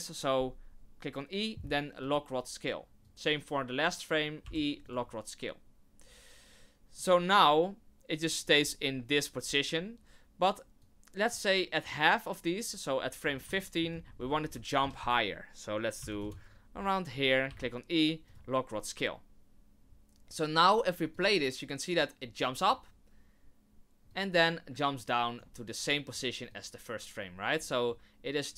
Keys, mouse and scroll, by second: 3.0 click, 4.4 i, 9.4-9.9 scroll down 2, 10.8 click, 13.2 scroll down 5, 13.5 shift+middle click, 14.4 g, 17.4 i, 21.1 click, 22.5 click, 24.1 click, 26.5 click.